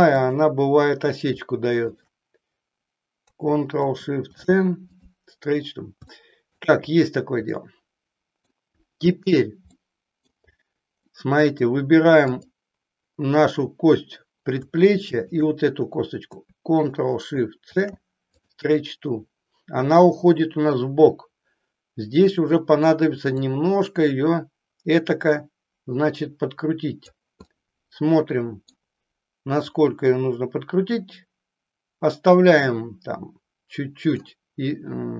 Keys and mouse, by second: 0.1 click, 1.9 shift+click, 4.1 ctrl+shift+c, 6.1 shift+middle click, 7.6 middle click, 9.7 middle click, 11.0 middle click, 15.2 shift+click, 23.4-27.1 drag, 27.5-28.9 middle drag, 29.7-34.2 drag.